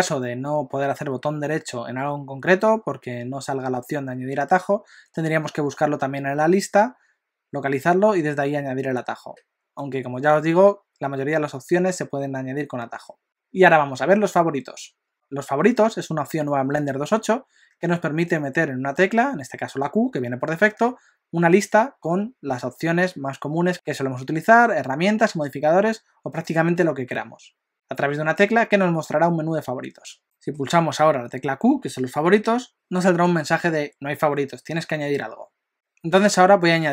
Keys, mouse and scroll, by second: 30.3 middle click, 32.3 q.